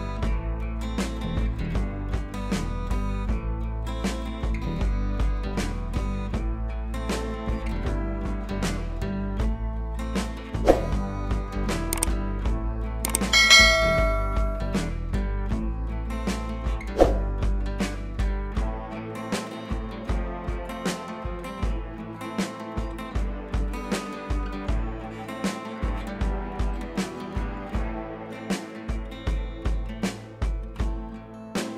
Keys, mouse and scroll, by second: 4.5-6.6 scroll down 1, 9.9 click, 10.9 ctrl+t, 11.6-12.1 alt+drag, 14.6-15.3 scroll up 1, 15.3-16.5 drag, 18.9 scroll down 1, 19.5 click, 22.7 ctrl+t, 23.5 u, 24.3-24.7 click, 27.2 click, 28.9 scroll up 1, 30.3 click, 31.2-31.5 scroll up 1.